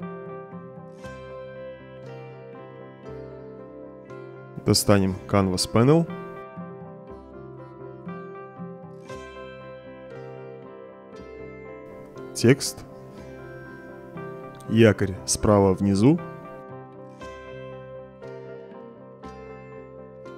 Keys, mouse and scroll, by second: 2.5 middle click, 4.2 click, 5.0 click, 5.6-6.1 middle drag, 6.1-6.7 right drag, 7.3-8.5 drag, 9.1-9.8 right drag, 9.9 middle click, 10.3-10.7 right drag, 11.5-13.4 drag, 14.3 click, 15.3 click, 16.7 right drag, 17.2 right click, 17.7-18.4 drag, 18.6 click, 19.8-20.3 drag.